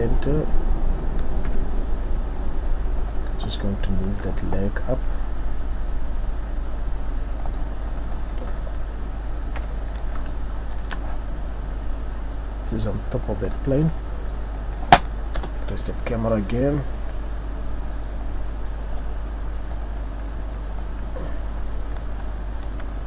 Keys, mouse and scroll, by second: 1.4 KP_3, 3.0 right click, 4.0 z, 5.0 click, 7.8-8.1 scroll down 2, 8.0-8.6 scroll up 2, 8.1 middle click, 9.5-9.8 scroll up 3, 9.5 KP_3, 10.6-11.1 shift+scroll up 6, 11.7 click, 13.7 scroll down 4, 13.8 middle click, 14.2-14.5 scroll down 2, 14.4 scroll up 1, 14.5 middle click, 15.4 KP_0, 16.2-16.8 scroll up 2, 18.3 click, 22.0 Tab, 22.6 z.